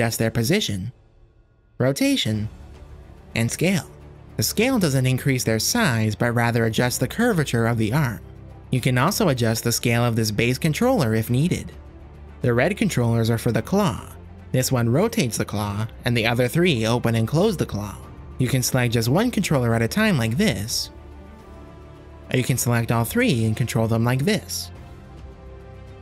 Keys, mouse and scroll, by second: 0.7 g, 1.3 r, 2.0 shift+click, 2.9 g, 3.3 s, 6.0 r, 8.7 g, 9.2 click, 9.9 click, 10.8 s, 12.2 r, 14.3-16.6 drag, 16.8 ctrl+z, 17.4-18.8 drag, 18.9 click, 19.4 r, 21.5 r, 22.6 r, 23.9 click, 24.2 shift+click, 25.0 r.